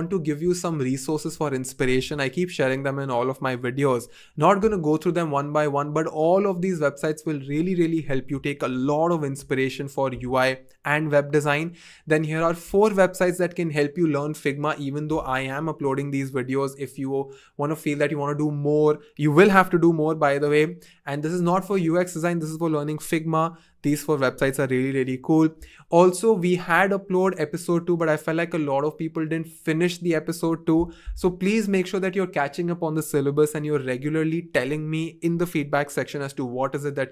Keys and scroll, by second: 1.9 2, 4.9 typing, 10.0 typing.